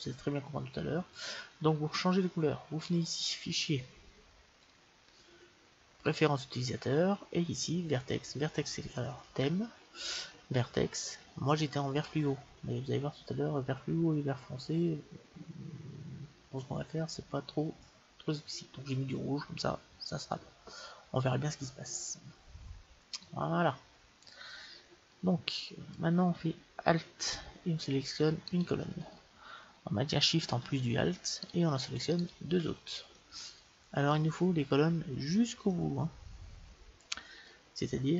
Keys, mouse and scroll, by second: 1.1-6.6 drag, 25.2-27.1 middle drag, 28.5-30.4 right drag, 31.4-33.4 right drag, 33.2 click, 33.4-37.5 middle drag, 37.8 middle click, 38.0-38.1 scroll up 1.